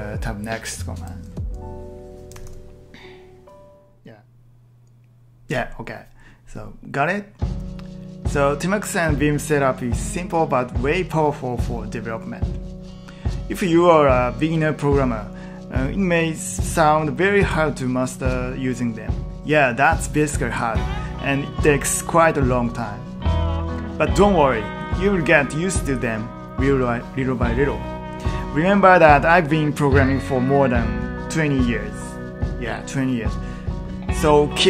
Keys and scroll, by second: 2.4 ctrl+t, 2.4 p.